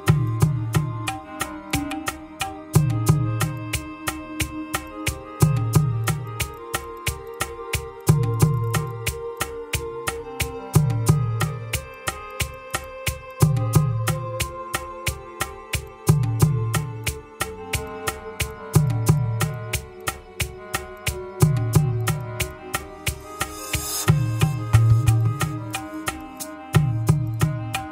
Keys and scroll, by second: 0.9 Return, 3.6 Escape, 6.0 Escape, 8.6 Escape, 9.5 Escape, 10.4 Escape, 11.5 Escape, 18.3 ctrl+c, 18.7 ctrl+v, 19.8 ctrl+s, 20.7 Escape, 21.3 Escape.